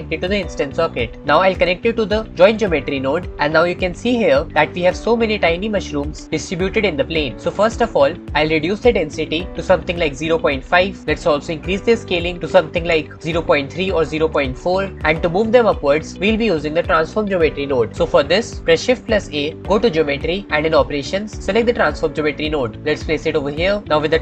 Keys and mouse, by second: 1.2 middle click, 8.2-10.6 drag, 12.4-14.5 drag, 15.1-16.1 drag, 19.2 shift+a.